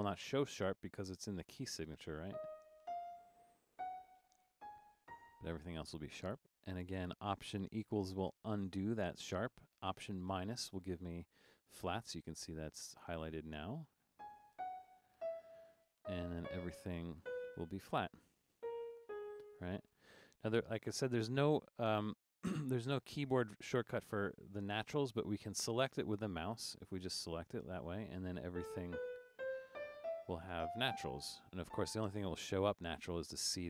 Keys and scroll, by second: 2.1-7.5 typing, 8.7 alt+=, 10.3 alt+-, 14.0-17.2 typing, 18.6-21.2 typing, 28.3-31.7 typing.